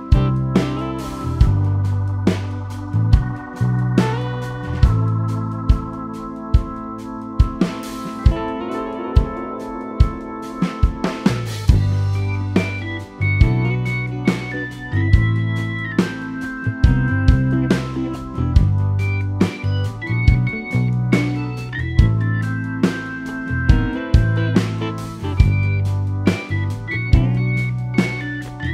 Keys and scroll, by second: 5.9 w, 9.1 m, 19.0 w.